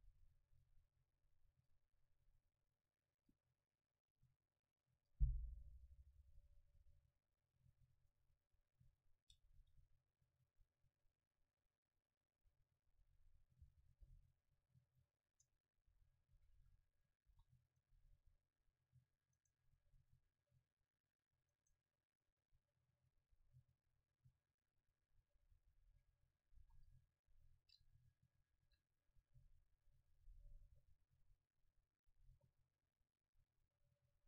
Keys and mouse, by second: 1.0 click, 1.9-4.0 drag, 5.1-8.1 drag, 9.8 Tab, 11.0-12.9 middle drag, 13.7 shift+l, 15.0-16.9 drag, 15.4 Tab, 16.0 a, 16.5 a, 16.6 a, 17.4 ctrl+s, 19.5-21.7 right drag, 25.9 a, 26.6 ctrl+s, 26.6 a, 28.7 F12.